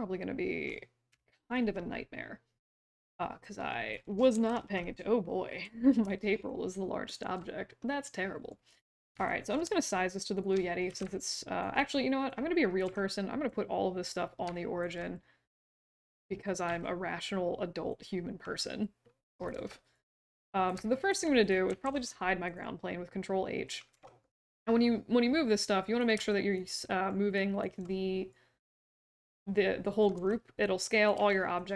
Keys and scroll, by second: 4.3 shift+h, 10.8 w, 12.8 r, 16.6 w, 19.5 r, 21.8 ctrl+h, 23.9 w, 30.1 r, 31.1 w.